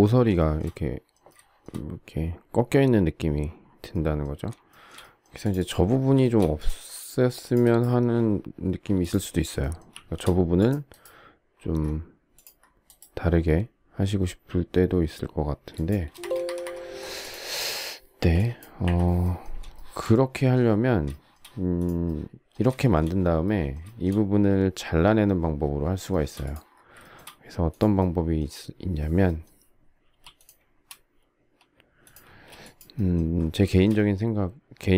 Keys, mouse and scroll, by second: 0.4 shift+middle click, 4.5 shift+scroll, 4.7 shift+middle click, 6.2 shift+middle click, 6.3 shift+middle click, 9.6 shift+middle click, 9.9 shift+c, 16.1 space, 16.2 Escape, 16.9 Escape, 18.2 Delete, 19.8 shift+middle click, 21.1 shift+middle click, 22.7 shift+middle click, 22.9 shift+middle click, 23.9 shift+middle click, 26.1 shift+middle click, 27.0 shift+middle click, 27.1 shift+middle click, 30.1 m, 32.2 space, 33.7 shift+middle click.